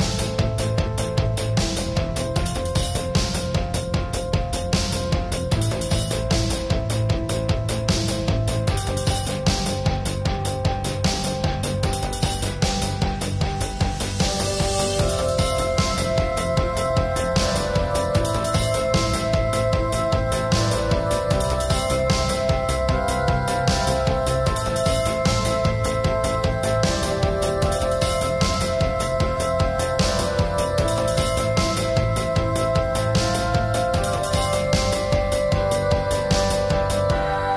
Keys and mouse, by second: 0.0 middle drag, 0.3 shift+space, 0.6 alt+s, 1.7-2.5 drag, 3.2 click, 3.4 click, 4.6 middle click, 4.9 shift+space, 5.3 [, 5.3 [, 5.4 [, 5.6-7.1 drag, 7.3 middle click, 7.5 click, 8.3-8.6 middle drag, 8.8-12.2 drag, 10.5 ctrl+s, 12.6-13.7 drag, 13.7-14.1 middle drag, 14.1-14.7 drag, 14.7-16.0 middle drag, 16.0 drag, 16.4 click, 17.6 middle click, 18.0 drag, 19.3 click, 19.6 middle click, 20.3-21.5 drag, 21.6-22.4 drag, 22.4-22.9 middle drag, 23.0-23.7 drag, 23.6-24.7 middle drag, 24.0-25.2 drag, 25.2-26.0 middle drag, 25.6-26.1 drag, 26.5 click, 26.6 ctrl+s, 26.8 click, 26.8 shift+space, 27.6 ctrl+s, 28.7 x, 29.5 ctrl+z, 30.4 click, 30.8 ], 32.4 ], 33.9 middle drag, 34.2-35.4 middle drag, 35.5-36.8 middle drag.